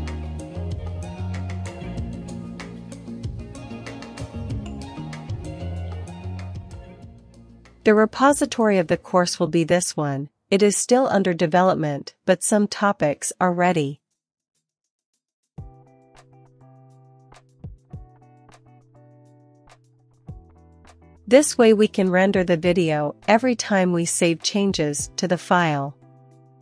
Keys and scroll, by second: 0.0-0.9 typing, 16.7 super+v, 18.3 Return, 21.9 Return, 21.9 ctrl+l, 22.7 Up, 23.4 Return.